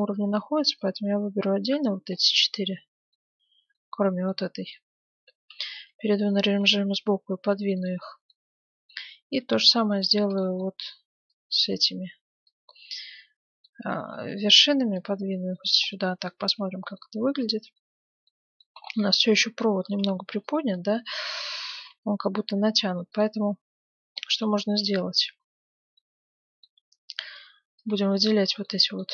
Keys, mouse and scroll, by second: 0.5 a, 0.7 b, 2.2-4.1 middle drag, 3.5 b, 4.2-6.9 middle drag, 5.5 KP_3, 6.6 g, 8.2 scroll down 1, 8.3 middle click, 8.5-9.5 scroll up 1, 9.5-12.5 middle drag, 9.5 a, 9.6 b, 10.3-12.0 right drag, 11.2 b, 13.1-14.8 middle drag, 13.9 g, 15.1-15.9 scroll down 1, 15.5 Tab, 15.9-18.9 middle drag, 16.4 z, 19.1 Tab, 20.1 a, 20.3 b, 21.7 g, 22.7 middle click, 23.7-24.1 scroll down 1, 24.1-27.9 middle drag, 24.5 z, 25.3 a, 27.2 b, 28.1-29.1 middle drag.